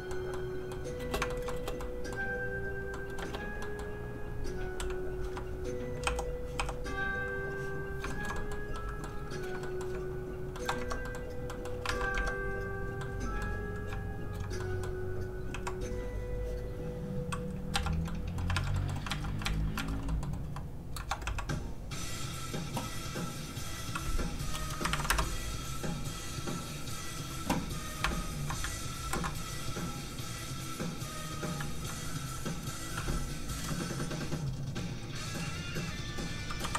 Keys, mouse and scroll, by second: 1.0 space, 1.3 shift+middle click, 1.5 middle click, 1.6 space, 1.8 middle click, 2.1-2.9 scroll up 1, 2.9 middle click, 3.2 space, 3.6 middle click, 4.3 click, 5.2 1, 6.0 3, 7.2 click, 7.9 scroll up 1, 8.1 shift+middle click, 8.3 middle click, 8.4 middle click, 9.6 middle click, 10.3 shift+click, 10.5 shift+middle click, 10.8 middle click, 11.0 middle click, 11.1-11.5 scroll up 2, 11.5 middle click, 11.9 alt+a, 12.1 Tab, 12.6 click, 13.0 middle click, 14.0 shift+click, 14.6 middle click, 15.5 shift+q, 16.8 click, 17.7 z, 18.1 middle click, 18.5 alt+a, 18.7 middle click, 18.8 middle click, 19.1 alt+z, 19.4 alt+z, 20.1 z, 20.2 middle click, 20.7 click, 21.2 shift+q, 22.3 click, 25.0 KP_1, 27.0 Return, 27.0 click, 28.3 shift+click, 29.0 ctrl+shift+l, 30.9 click, 32.6 click.